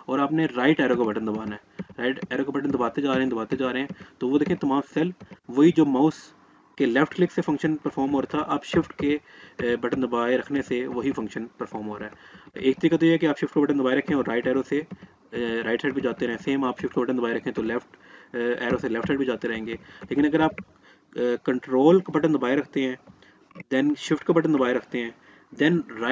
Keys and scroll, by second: 13.3 shift+Right, 16.8 shift+Left.